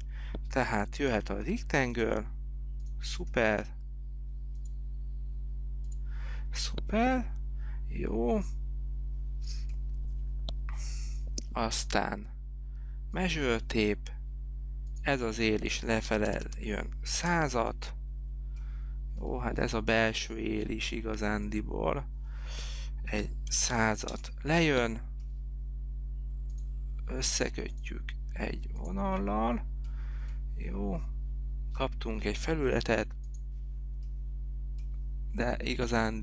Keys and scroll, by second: 1.3 r, 16.0-16.9 typing, 17.5 Return, 23.3 1, 23.7 0, 24.3 Return, 32.9 p.